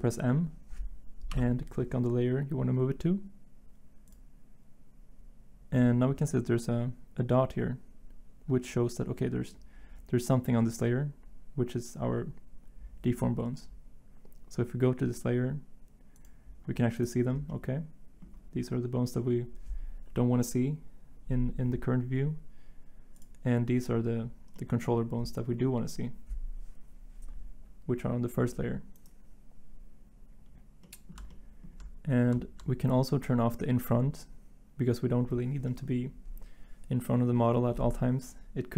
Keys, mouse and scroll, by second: 5.5 m.